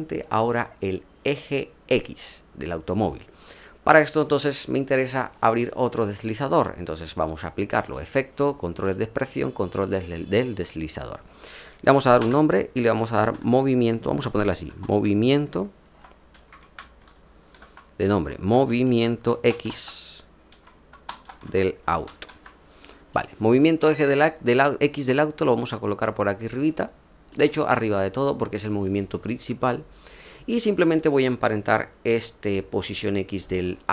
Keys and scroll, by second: 12.1 Return, 12.9-15.2 typing, 16.3-18.0 typing, 19.2 typing, 20.4-22.6 typing.